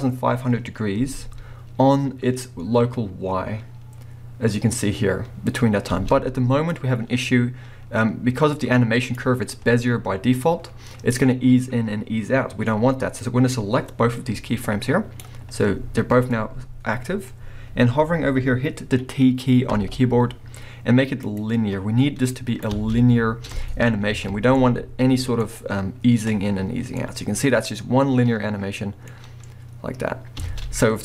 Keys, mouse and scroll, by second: 0.5-1.0 drag, 1.0 space, 5.9 space, 6.2-24.5 drag, 19.7 t, 22.7 space, 24.5-27.2 middle drag, 30.0 scroll down 1, 30.4 space.